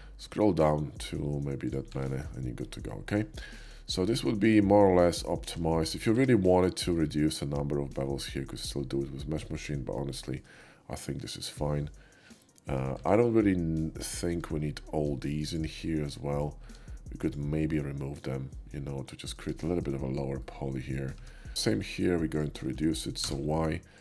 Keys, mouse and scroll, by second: 1.7 click, 2.0 Tab, 2.3 middle drag, 2.6-3.1 middle drag, 3.3 shift+middle drag, 3.8-5.5 shift+middle drag, 5.7 shift+middle drag, 6.1 Tab, 6.6 middle click, 9.0 middle click, 10.2-12.8 shift+middle drag, 13.0 Tab, 14.4 middle click, 15.4 alt+shift+click, 16.1 alt+shift+middle click, 16.6 x, 17.1 click, 17.8 middle click, 18.0 right click, 18.6 middle click, 19.4 Tab, 20.3 middle click, 21.2 Tab, 21.6-23.2 ctrl+drag, 23.2 y, 23.9 click.